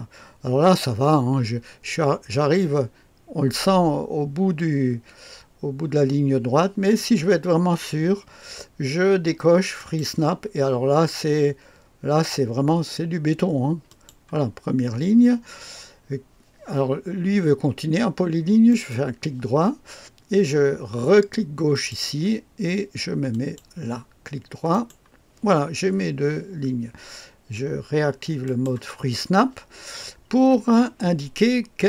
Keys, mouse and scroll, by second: 9.8 click, 13.9 click, 18.7 right click, 21.7 click, 23.3 click, 24.7 right click, 28.4 click.